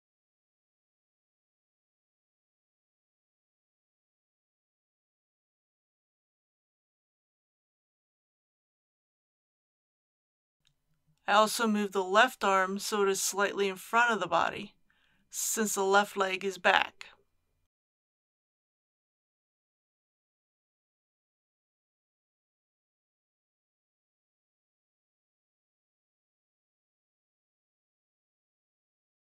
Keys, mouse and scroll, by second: 1.9 r, 2.7 x, 7.5 click, 9.9 KP_1, 11.6 click, 12.5 r, 12.9 y, 16.3 click, 17.6-18.8 middle drag, 19.4 r, 19.9 x, 22.0 click, 23.7 KP_3, 28.1 r, 28.8 x.